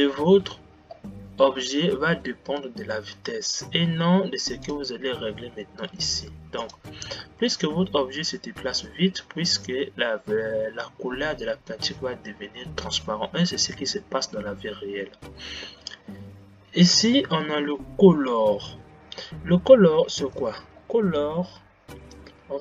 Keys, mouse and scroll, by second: 17.2 click, 20.6 click.